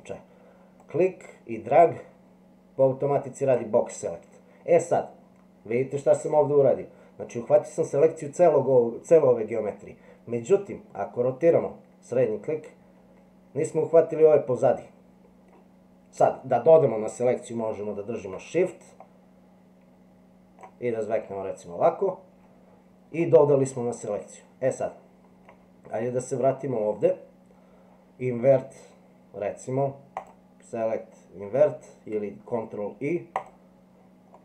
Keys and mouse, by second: 0.9-3.6 drag, 11.1-15.5 middle drag, 19.0-20.6 shift+drag, 23.2-25.4 middle drag, 26.1 middle click, 30.3-33.5 drag, 34.3-34.4 middle drag.